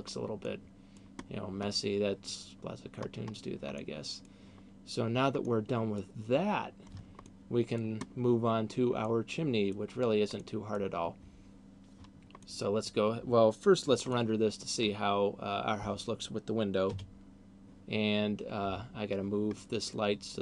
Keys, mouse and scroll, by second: 0.5 middle click, 1.0-1.7 scroll down 2, 1.8 middle click, 2.8-3.5 scroll up 2, 3.8 middle click, 5.5 middle click, 7.3 middle click, 8.3-9.0 scroll down 2, 9.0 middle click, 10.3 middle click, 12.3 middle click, 14.0 middle click, 18.8 Escape, 19.8 middle click, 20.3 right click.